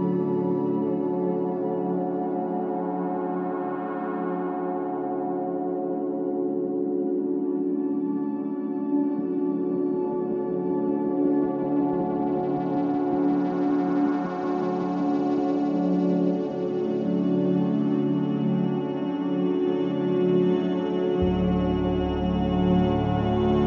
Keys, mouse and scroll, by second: 0.3 click, 2.7-4.2 middle drag, 4.8 scroll up 1, 5.1-6.3 middle drag, 6.3 click, 7.5-8.1 middle drag, 8.1 scroll up 1, 8.4-10.7 middle drag, 10.9-11.3 scroll down 2, 11.3-12.8 middle drag, 13.3 click, 14.0-15.6 middle drag, 16.6-17.5 drag, 17.7-18.8 middle drag, 20.5-21.0 scroll up 1, 22.2 ctrl+shift+x.